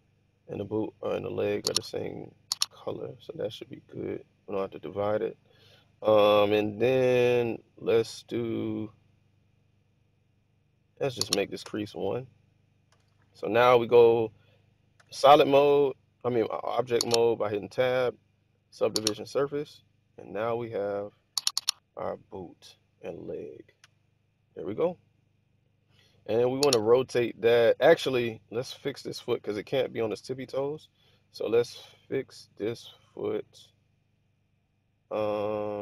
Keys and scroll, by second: 11.5 1, 11.6 Return, 12.8 1, 14.9 Tab, 23.8 1, 30.0 Tab.